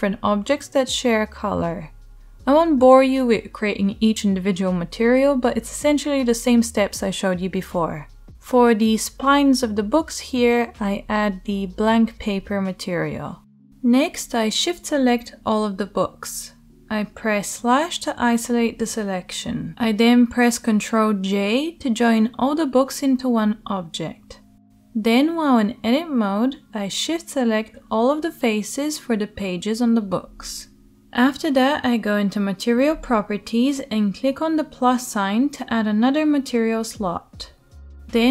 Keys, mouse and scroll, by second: 1.4 Tab, 1.4 scroll up 1, 1.7 middle click, 1.8 Tab, 1.8 right click, 2.3 middle click, 2.5 right click, 2.7 right click, 2.9 shift+middle click, 3.2 right click, 3.9-5.8 middle drag, 5.6 Tab, 5.8-8.5 right drag, 5.9 Tab, 8.5 shift+middle click, 8.6-9.7 right drag, 9.7-13.1 middle drag, 12.8 Tab, 13.1 shift+drag, 13.3 shift+middle click, 13.3 shift+click, 13.4 shift+drag, 13.7-14.9 shift+middle drag, 14.9 shift+right click, 15.1 shift+middle drag, 15.4-20.1 right drag, 17.2 /, 20.1-21.3 middle drag, 20.8 ctrl+j, 21.3 right click, 21.5 g, 21.8 Tab, 22.1 middle click, 22.2 shift+right click, 22.8 shift+middle click, 23.0 shift+right click, 23.3 shift+middle click, 24.0-25.0 shift+right drag, 25.0 shift+middle click, 25.1-26.1 right drag, 26.1 shift+middle click, 26.3 shift+right click, 26.9 shift+middle click, 27.6 shift+right click, 28.4 shift+middle click, 28.6 shift+right click, 28.8-30.5 shift+right drag, 30.3 shift+middle click, 30.5 shift+middle click, 30.5 shift+click, 30.6-31.8 shift+middle drag, 31.5 shift+Tab, 31.8-38.3 right drag.